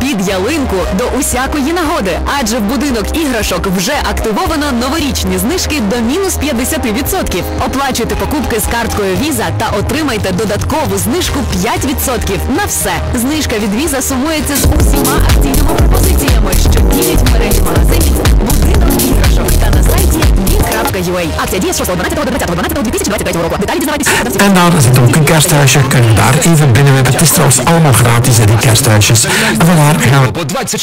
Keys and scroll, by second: 21.4 Page_Down, 30.2 Page_Down.